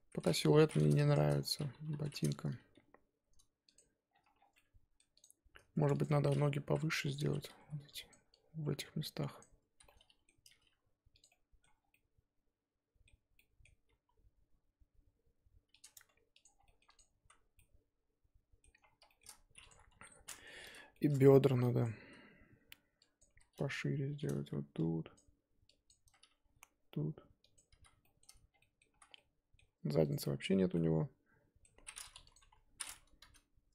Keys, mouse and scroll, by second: 1.1 shift+click, 1.4-1.8 scroll down 4, 1.8 KP_3, 2.1-2.7 scroll up 4, 2.7 g, 4.1-4.4 scroll down 8, 4.4 Tab, 4.5 middle click, 5.2 click, 6.0 shift+click, 6.1-6.6 scroll up 1, 6.6 KP_1, 7.2 Tab, 7.4 z, 7.6 1, 8.1 click, 9.4 click, 9.7 z, 9.8 middle click, 10.5 g, 11.3 middle click, 11.7 scroll down 1, 11.9-13.9 middle drag, 13.9 g, 15.9 Tab, 16.5 scroll down 1, 16.6 middle click, 16.8 click, 17.2 z, 17.6-18.8 middle drag, 18.8-19.7 scroll up 3, 19.1 shift+middle click, 19.7 click, 19.9 KP_3, 20.4 Tab, 20.6 z, 20.9 shift+middle click, 21.1-21.6 scroll up 2, 21.8 click, 22.0-24.4 typing, 23.2 click, 25.1 click, 25.8 click, 26.0 z, 26.4 g, 27.8 z, 28.0 shift+middle click, 28.3 scroll up 1, 28.5 scroll down 3, 28.6 middle click, 28.9 z, 29.0 scroll down 4, 29.1 middle click, 29.6 Tab, 30.1 click, 30.4 middle click, 30.6 z, 30.7-31.8 middle drag, 31.8-32.3 scroll up 2, 32.3 click, 32.4 KP_3, 32.9 scroll up 2, 33.0 Tab, 33.2 z.